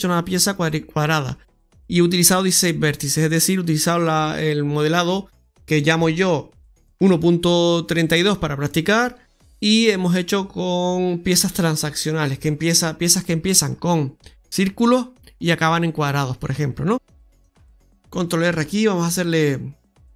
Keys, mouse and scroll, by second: 13.1-14.7 scroll up 6, 14.7 right click, 16.7 scroll down 2, 17.0 middle click, 17.8 alt+shift+right click, 17.8 middle click, 17.8-18.3 scroll down 1, 17.8 x, 18.3 shift+r, 19.9 middle click.